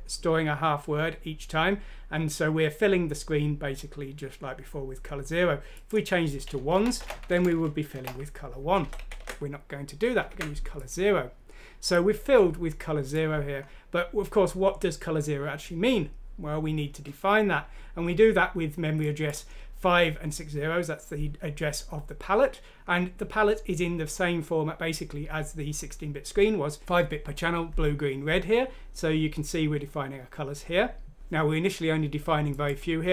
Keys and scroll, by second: 6.7 Right, 7.0 1, 7.3 Left, 7.5 Left, 8.8 ctrl+z, 9.0 ctrl+z, 9.2 ctrl+z, 10.3 ctrl+z.